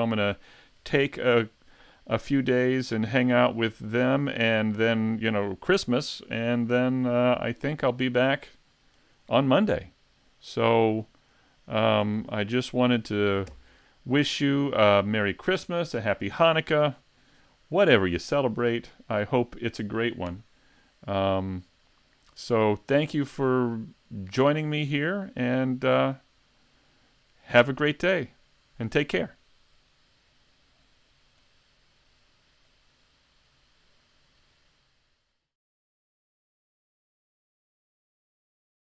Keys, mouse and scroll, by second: 10.4 middle click, 11.3-12.1 scroll down 1, 12.2 s.